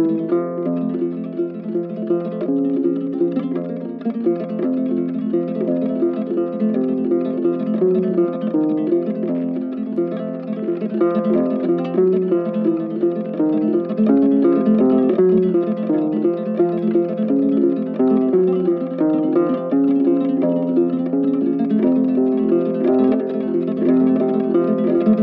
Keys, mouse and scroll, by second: 2.3 ctrl+z, 10.8 ctrl+right click.